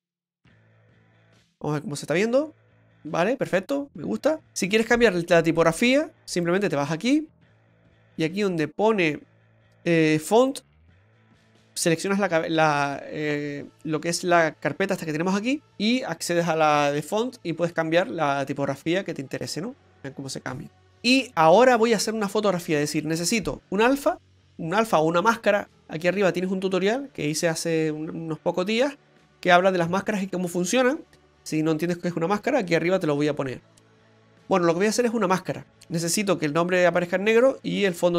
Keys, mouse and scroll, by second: 2.5 click, 6.3 click, 7.0 click, 7.8-9.3 scroll down 5, 10.4 click, 15.3 click.